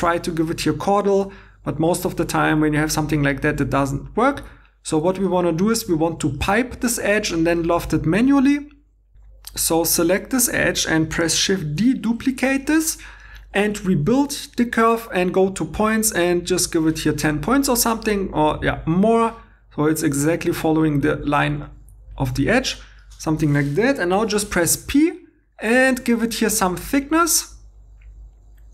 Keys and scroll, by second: 3.1 Escape, 9.1 2, 11.6 shift+d, 24.1 p.